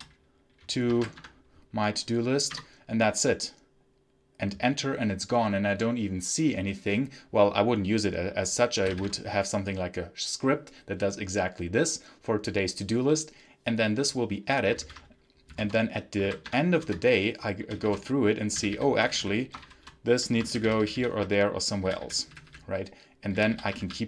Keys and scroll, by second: 1.0 ctrl+t, 1.0 Tab, 8.4-9.3 typing, 14.7 ctrl+c, 15.4 v, 15.5 space, 16.1 ctrl+t, 16.4 Tab, 16.7 Return, 17.7 shift+g, 18.4 d, 18.9 g, 19.5 shift+p, 20.4 ctrl+j, 21.7 d, 22.2 g, 23.2 d, 23.7 ctrl+s.